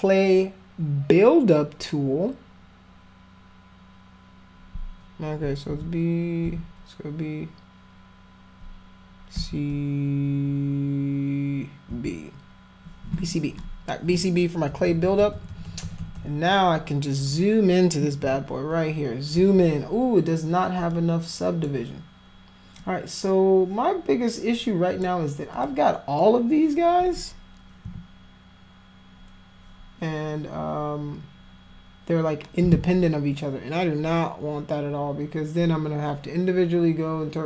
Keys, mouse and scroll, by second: 5.7 b, 6.5 b, 9.4 c, 11.9 b, 14.7-16.2 typing, 18.3 f, 20.9 click, 22.8-25.1 drag, 25.6 click, 27.9 f.